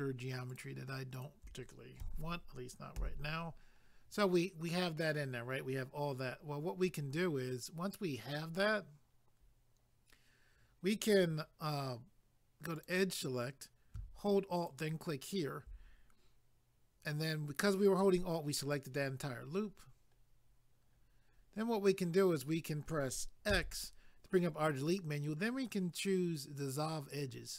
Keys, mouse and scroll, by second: 0.5 shift+click, 1.1 shift+click, 2.0 f, 3.8 scroll down 1, 5.9 scroll up 1, 8.3 scroll down 1, 12.8 click, 14.5 alt+click, 19.4 scroll down 1, 19.5 scroll, 20.9 scroll up 1, 27.1 click.